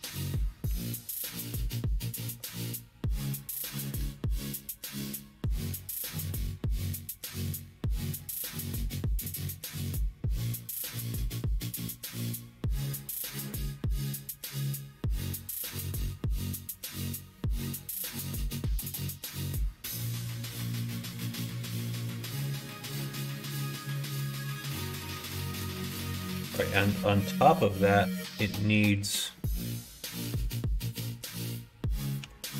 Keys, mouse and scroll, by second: 2.3 BackSpace, 3.3 KP_0, 3.4 KP_0, 7.0-8.5 middle drag, 9.9-12.1 drag, 12.7 middle click, 14.1 middle click, 14.9 middle click, 16.1 g, 18.2 g, 24.9 shift+middle click, 25.4 middle click, 26.0 shift+middle click, 28.3 middle click, 29.2 middle click, 32.1 g.